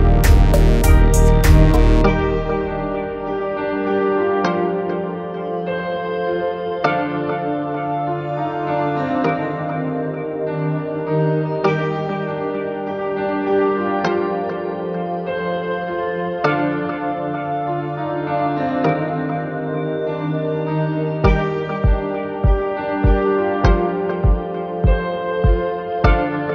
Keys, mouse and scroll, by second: 0.0 click, 0.1 middle click, 0.2 scroll down 2, 0.7 shift+middle click, 0.7 scroll up 4, 0.7 shift+middle click, 0.9 shift+middle click, 0.9 scroll down 2, 1.0 scroll up 1, 1.0 scroll down 1, 1.1 shift+middle click, 1.1 g, 1.9 scroll down 3, 2.0 middle click, 2.1 shift+middle click, 2.1-2.7 scroll up 7, 2.1 middle click, 2.2 s, 2.5 click, 2.6 shift+middle click, 2.6 shift+middle click, 2.7 g, 3.4 click, 3.5 scroll down 3, 3.6 scroll up 3, 3.6 shift+middle click, 3.7 g, 5.3 scroll down 2, 5.3-9.7 typing, 5.5 click, 5.6 click, 6.3 click, 6.6 middle click, 6.7 scroll down 5, 6.8 click, 7.4 click, 7.5 shift+middle click, 9.7 ctrl+z, 10.3 click, 10.3 middle click, 10.4-11.3 scroll up 11, 10.7 shift+click, 10.9 shift+middle click, 11.0 shift+middle click, 11.2 shift+middle click, 11.3 shift+middle click, 11.3 middle click, 11.4 scroll down 6, 11.5 shift+middle click, 11.8-12.1 scroll up 5, 11.9 shift+middle click, 12.1 shift+middle click, 12.2 scroll down 1, 12.3 shift+middle click, 12.5 scroll up 2, 12.6 ctrl+s, 13.9-14.2 scroll down 3, 13.9 shift+a, 14.3 click, 14.3 g, 14.7 scroll up 7, 14.9 shift+middle click, 15.0 /, 15.1 middle click, 15.2 scroll down 2, 15.3 middle click, 15.4 click, 15.6 shift+middle click, 15.9 shift+middle click, 16.1 click, 16.2 s, 16.6 middle click, 16.7 click, 16.8 middle click, 17.3 shift+middle click, 17.7 middle click, 17.8 click, 17.9 middle click, 17.9 scroll down 1, 18.0 e, 18.2 middle click, 18.8 shift+click, 18.9 e, 19.3 g, 19.4 middle click, 19.4 click, 19.8 r, 20.3 middle click, 20.7 click, 20.7 middle click, 20.8 shift+click, 21.1-26.5 typing, 21.6 click, 22.5 click, 22.9 click, 23.6 click, 24.6 click, 24.8 click, 25.2 click, 25.4 click, 26.0 click, 26.4 click.